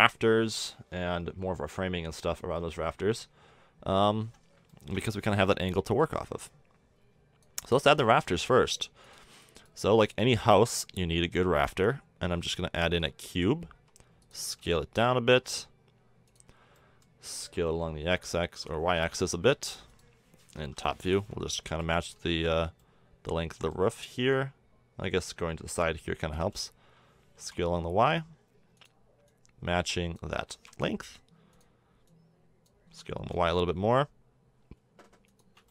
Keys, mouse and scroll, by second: 3.3 KP_1, 8.1 middle drag, 10.4 shift+a, 13.7 s, 14.4 z, 15.3 s, 17.4 s, 20.6 KP_7, 21.6 z, 21.7 z, 22.1 z, 22.8 middle drag, 26.3 s, 29.3 click, 29.8 click, 30.4 s, 30.6-31.5 drag, 32.1-32.9 drag, 32.9 s, 33.8-35.3 drag.